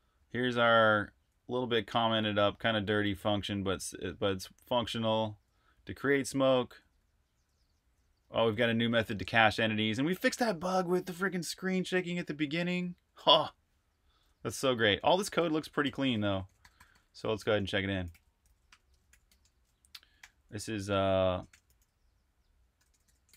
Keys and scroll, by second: 0.0-5.6 typing, 8.9-9.8 typing, 11.8-12.5 typing, 14.9-20.0 typing, 21.1-23.3 typing.